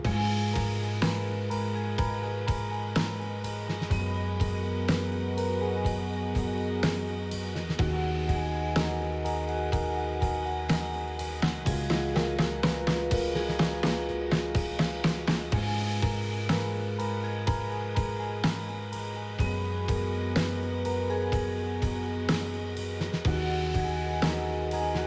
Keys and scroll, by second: 6.8 Tab, 10.9 KP_1, 12.9 ctrl+shift+a, 14.6 Escape, 15.9 shift+a, 18.8 ctrl+z, 19.1 ctrl+z, 19.6 ctrl+z, 21.0 ctrl+z, 23.4 ctrl+z, 24.2 KP_1.